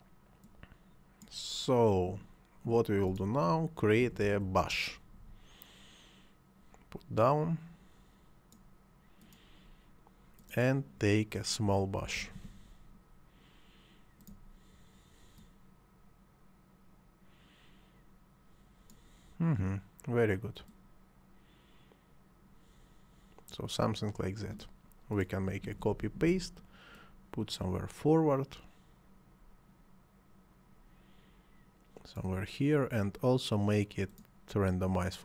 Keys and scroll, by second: 4.0 ctrl+c, 4.2 ctrl+v, 11.7 s, 12.0 m, 12.4 a, 25.7 ctrl+c, 25.9 ctrl+v.